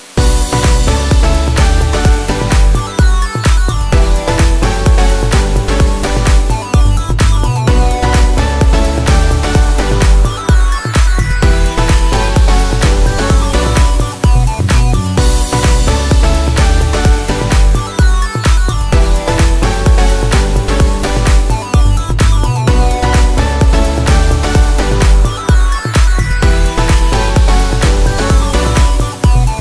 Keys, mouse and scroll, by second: 2.7 double click, 2.7-4.7 typing, 6.1 BackSpace, 6.4 1, 7.9 3, 8.6 BackSpace, 14.8 Left, 15.6 Down.